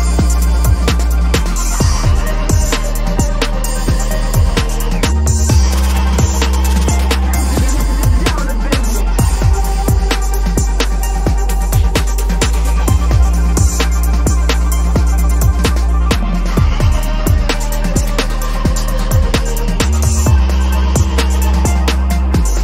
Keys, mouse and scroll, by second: 1.3-3.1 scroll up 1, 5.8 ctrl+j, 7.1 Return, 8.6 alt+shift+click, 9.3 right click, 11.2 double click, 11.7 BackSpace, 12.5 ctrl+s, 19.6 alt+shift+click, 20.1 right click, 22.0 double click, 22.4 BackSpace.